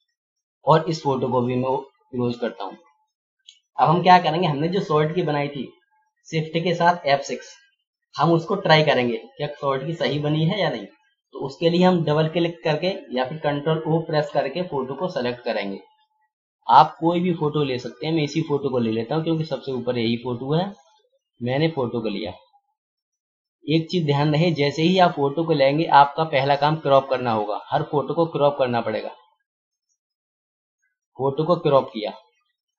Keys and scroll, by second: 14.3 ctrl+o.